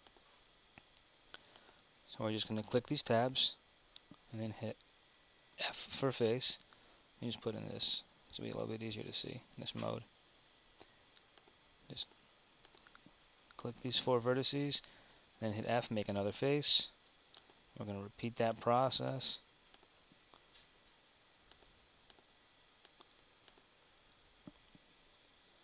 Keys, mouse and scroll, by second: 7.0 z.